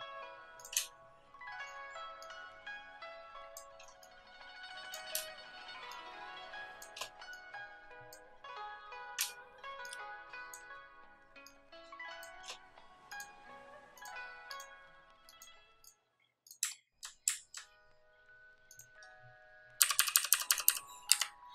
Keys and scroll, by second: 19.7 Down, 19.9 Down, 20.0 Down, 20.2 Down, 20.4 Down, 20.6 Down, 21.0 Up.